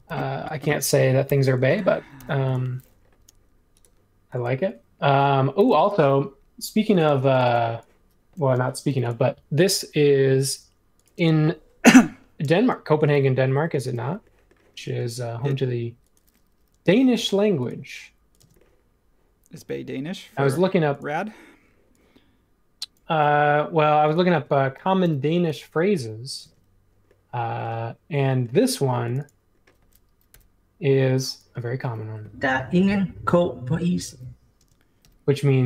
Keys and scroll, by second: 0.0 super+z, 1.2 BackSpace, 2.1 BackSpace, 5.7 m, 7.0 space, 8.8 m, 11.1 space, 12.4 space, 13.7 space, 15.4 ;, 17.1 |, 18.4 space, 25.0 m, 26.4 space, 30.3 r, 34.5 space.